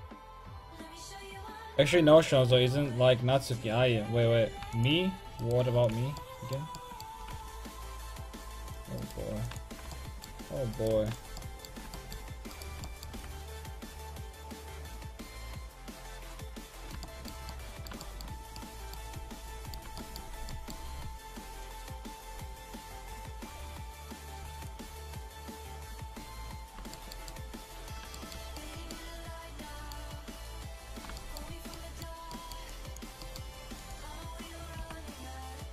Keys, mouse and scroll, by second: 0.6 right click, 4.5 w, 5.5 right click, 5.8 w, 6.2-7.8 middle drag, 7.3 r, 9.1-10.6 right drag, 9.4 w, 9.9 click, 11.0 w, 13.2 r, 17.1-18.8 middle drag, 21.3-26.5 drag, 30.5-32.2 drag, 32.7-34.8 drag, 32.7-35.4 middle drag, 34.8 r, 35.4 click.